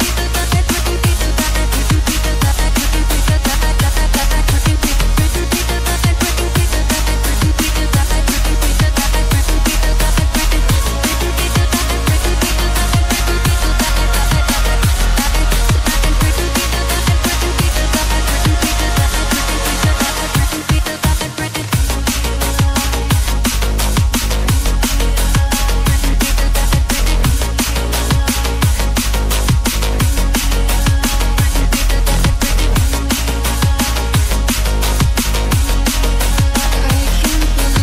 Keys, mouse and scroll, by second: 3.9 click, 4.0 double click, 4.7 click, 6.2 double click, 8.3 click, 8.4 double click, 10.0 click, 12.5-13.0 scroll down 1, 14.6 scroll down 1, 14.7-15.8 scroll up 1, 15.8-16.4 scroll down 1, 16.9 click, 19.0 click, 22.2 click, 24.4 scroll up 1, 25.0 click, 28.9 double click, 30.3 click.